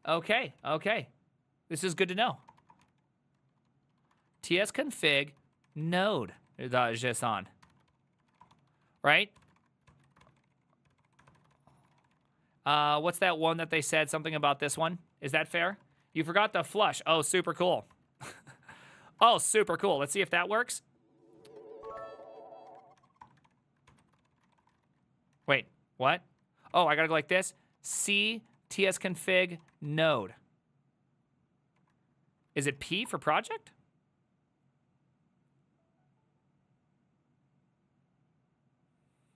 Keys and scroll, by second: 0.1 ctrl+a, 0.4 1, 0.6 ctrl+c, 1.8-16.7 typing, 17.2 ctrl+a, 17.4 ctrl+a, 17.7 ctrl+a, 18.0 ctrl+a, 18.3 ctrl+c, 18.4 ctrl+c, 18.7 Up, 19.2 Return, 21.6 ctrl+a, 21.6-25.1 typing, 25.4 ctrl+a, 25.6 ctrl+a, 26.1 ctrl+c, 26.8 Up, 27.1-30.1 typing, 29.2 Tab, 30.2 Return, 31.8 Up, 31.9-33.0 typing, 32.7 Right, 33.1 Return.